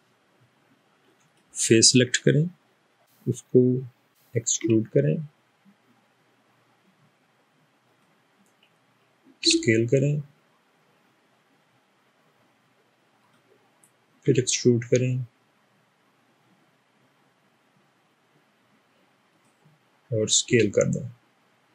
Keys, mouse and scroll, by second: 4.8 e, 7.9 click, 8.0 typing, 9.4 typing, 13.2 click, 14.2 typing, 19.3 click, 20.6 s.